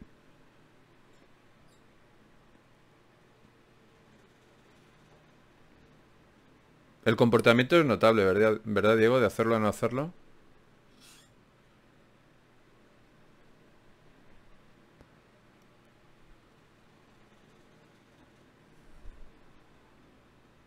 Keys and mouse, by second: 3.6 KP_Divide, 13.0 middle click, 13.8-20.6 middle drag.